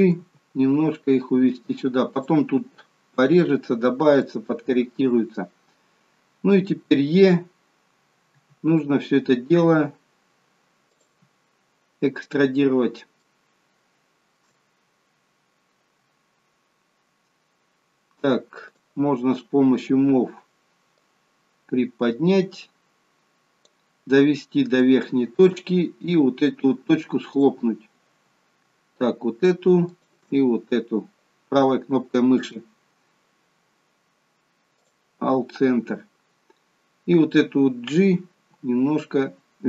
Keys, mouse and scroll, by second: 0.2 g, 3.1 scroll down 1, 4.3 shift+middle click, 8.4 e, 12.3-13.0 scroll down 5, 13.2 shift+middle click, 18.8 click, 21.1 click, 24.9 shift+middle click, 25.7-26.8 scroll up 5, 27.4 click, 30.0 shift+click, 32.5 right click, 38.4 g.